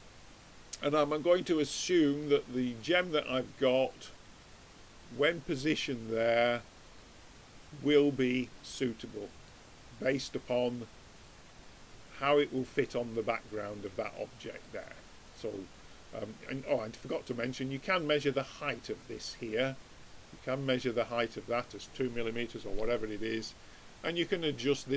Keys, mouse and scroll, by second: 1.8-3.5 middle drag, 3.1-5.6 drag, 3.1 right click, 6.9 middle click, 8.3 middle click, 8.5 middle click, 10.9 click, 11.6 middle click, 11.8 click, 11.8 middle click, 12.4-13.6 middle drag, 13.8 middle click, 14.1 middle click, 14.4-15.7 middle drag, 15.8-18.4 middle drag, 18.4-20.2 drag, 24.3 click.